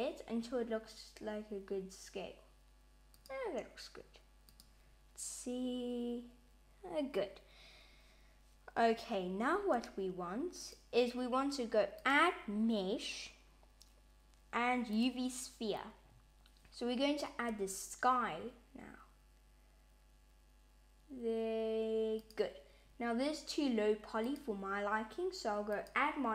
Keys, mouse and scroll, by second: 4.5 click, 9.4 s, 11.8 click, 17.4 s, 24.2 click, 25.6 click.